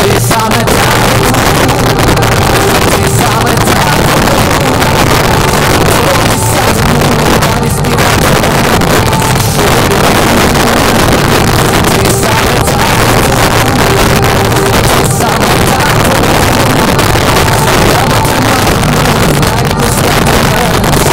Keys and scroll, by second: 0.2-0.8 Down, 0.3 Return.